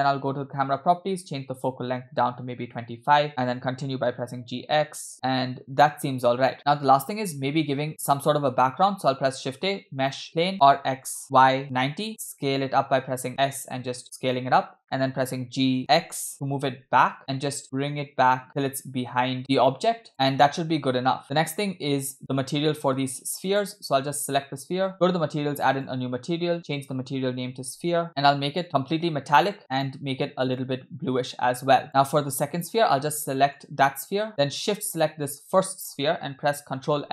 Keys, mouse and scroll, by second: 1.6-2.8 drag, 3.3 space, 5.1 g, 5.1-6.2 scroll up 2, 6.3 space, 8.6 scroll down 2, 8.9 shift+a, 10.5 r, 12.3 s, 15.1 g, 20.3 space, 21.1 space, 21.2 space, 23.5 click, 24.9 click, 25.7-26.4 drag, 26.6-28.0 drag, 28.0 middle click, 28.6 click, 29.4 middle click, 29.6 scroll up 2, 29.8 click, 32.5 click, 33.6 click, 35.0 shift+click, 36.9 ctrl+l.